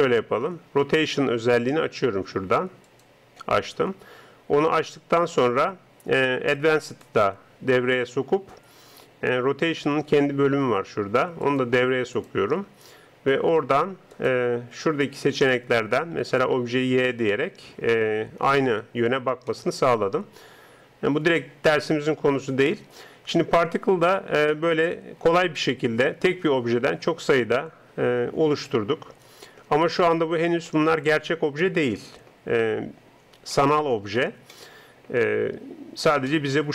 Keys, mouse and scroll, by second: 2.9-16.4 drag, 19.1-27.1 middle drag, 28.1 middle click, 29.7 middle click, 30.7-33.8 middle drag, 33.8-34.6 scroll up 1, 34.6-34.9 scroll up 1, 34.9-36.3 middle drag, 36.3-36.7 scroll up 2, 36.5 middle click.